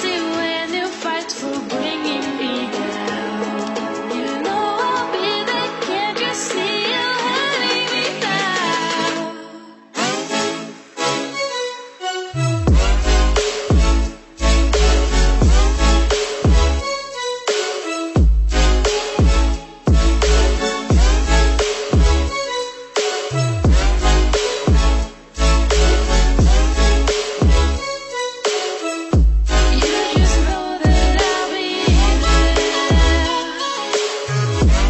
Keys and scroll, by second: 0.9 Delete, 11.2 Delete, 31.5 Delete.